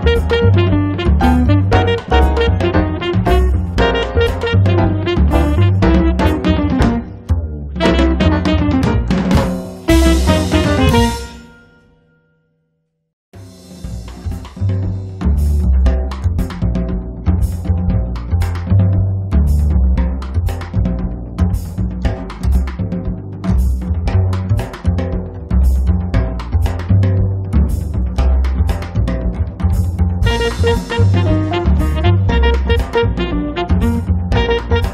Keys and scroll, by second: 26.2 space, 32.2-33.1 typing.